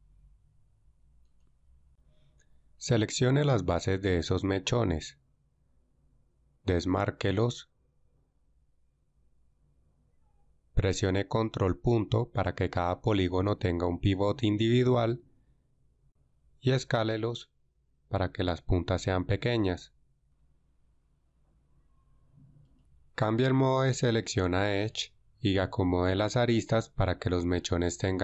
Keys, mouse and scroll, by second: 8.5 ctrl+e, 12.0 ctrl+., 18.3 s, 24.1 ctrl+Tab.